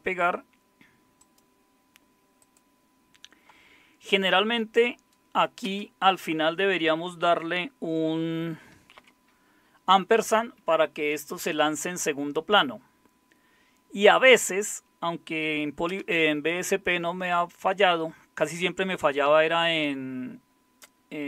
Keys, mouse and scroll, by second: 5.6 space, 9.0 shift+7, 14.2 Up, 15.9 Return.